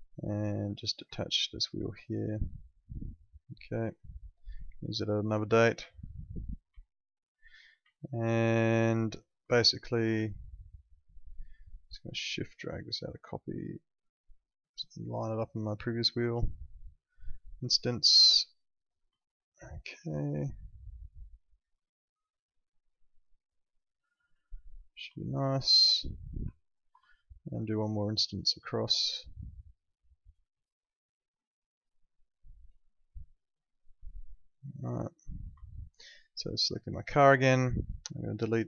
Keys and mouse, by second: 5.9 alt+middle click, 6.8 alt+middle click, 8.6 alt+middle click, 9.4 alt+middle click, 9.8 click, 10.3 alt+middle click, 11.8 shift+click, 17.5 click, 19.2 alt+middle click, 21.6 click, 24.4 alt+middle click, 25.2 alt+middle click, 26.6 ctrl+click, 27.1 alt+middle click, 28.5 shift+click, 33.6 click, 34.3 alt+middle click, 35.6 alt+middle click, 36.3 click, 37.1 alt+middle click, 38.2 click.